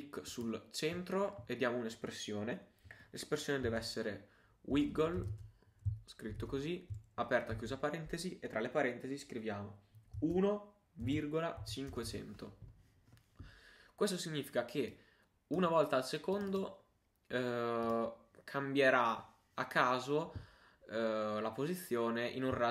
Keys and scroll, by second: 5.6-6.9 typing.